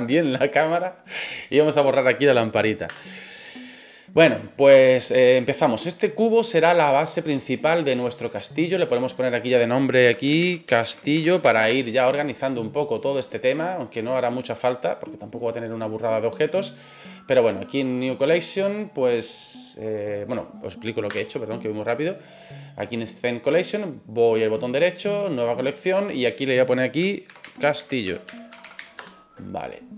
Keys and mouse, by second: 1.7 right click, 2.9 Delete, 5.6 right click, 6.1-6.6 middle drag, 7.3-8.0 shift+middle drag, 9.1-12.2 drag, 11.3 l, 16.7 right click, 21.1 Delete, 24.5 right click, 25.8 click, 26.0-29.9 drag, 28.6 l.